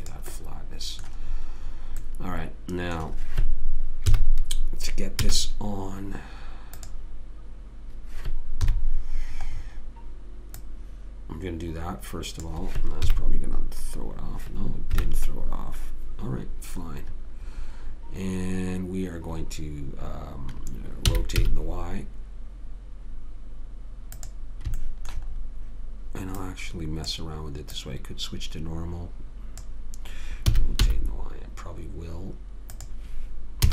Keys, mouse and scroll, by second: 1.1 middle click, 1.8-3.1 middle drag, 4.4 KP_3, 5.6 z, 9.0 KP_1, 9.9 middle click, 10.0-12.2 middle drag, 13.5 KP_3, 15.3 KP_1, 21.5 r, 25.2 middle click, 26.7-29.9 drag, 30.8 r.